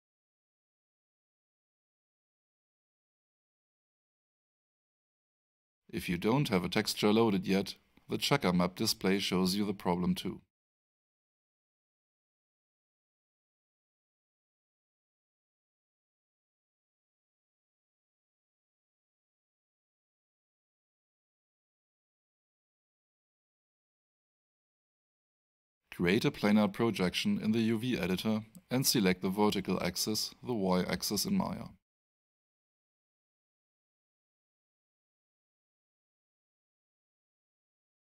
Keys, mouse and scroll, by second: 1.0 middle click, 1.8 click, 5.0 alt+click, 6.8 alt+middle click, 7.9 alt+right click, 9.2 alt+middle click, 10.2 alt+right click, 12.2 alt+middle click, 16.3 alt+right click, 18.4 alt+click, 19.6 f, 25.8 click, 28.6 click, 30.6 click, 35.3 click.